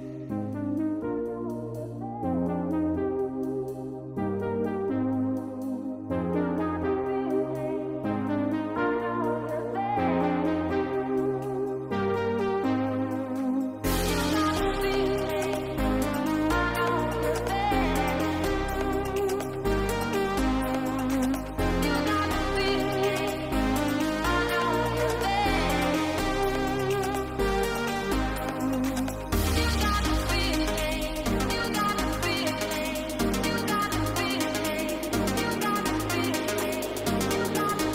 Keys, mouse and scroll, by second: 1.9 click, 2.4 alt+click, 3.2 alt+click, 6.5 middle click, 7.2 alt+click, 8.0 middle click, 9.4 shift+middle click, 9.8 shift+middle click, 11.8 alt+click, 12.4 click, 13.1 middle click, 14.1 middle click, 14.7 g, 16.7 middle click, 17.7 middle click, 18.1 Tab, 18.8 click, 21.2 click, 21.9 click, 22.8 click, 23.2 click, 23.8-25.2 middle drag, 25.7 shift+middle click, 27.2 a, 28.0 middle click, 29.4 g, 31.2 click, 31.9 click, 32.6 shift+middle click, 33.3 right click, 34.4 g, 36.0 a, 36.6 g, 37.6 middle click.